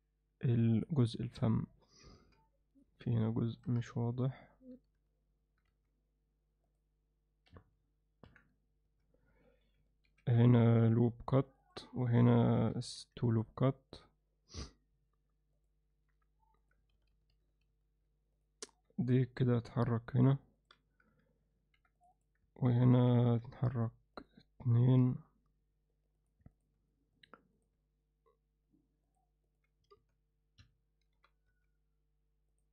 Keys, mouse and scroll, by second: 2.2 z, 3.1 alt+middle click, 4.0 ctrl+z, 4.2 ctrl+z, 5.7 z, 8.3 KP_1, 8.9 z, 10.1 ctrl+r, 17.0-18.0 ctrl+z, 19.3 g, 21.6 ctrl+r, 25.0 g, 26.8 g, 27.8 g, 30.0 z, 31.2 g.